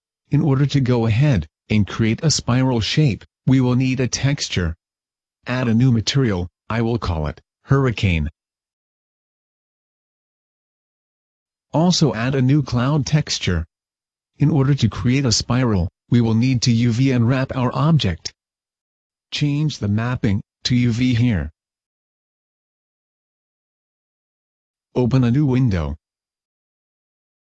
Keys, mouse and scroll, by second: 5.5 click, 6.1 click, 6.9 click, 12.1 click, 12.9 click, 15.0 middle click, 15.9-16.6 scroll up 1, 17.3-17.8 scroll down 3, 18.4 click, 19.8 click, 20.5 click, 21.3 click, 23.1-24.0 scroll down 1, 25.1 click.